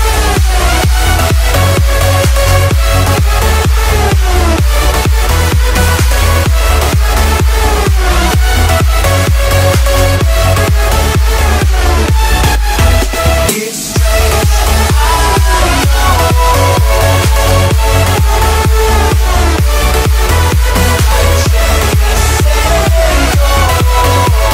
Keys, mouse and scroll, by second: 1.0 m, 1.7 ctrl+click, 2.8 Right, 2.9 scroll down 1, 4.4 click, 4.6 space, 4.9 middle click, 5.4 scroll down 1, 5.7 shift+middle click, 6.5 click, 7.1 scroll up 1, 7.5 shift+middle click, 8.0 scroll down 1, 8.4 click, 8.9 scroll up 1, 9.2 shift+middle click, 12.4-12.7 scroll up 1, 12.7 t, 13.6 click, 13.8-15.8 scroll down 1, 20.1 click, 20.2 space, 20.4-21.3 scroll down 1, 21.5 t, 21.9 click.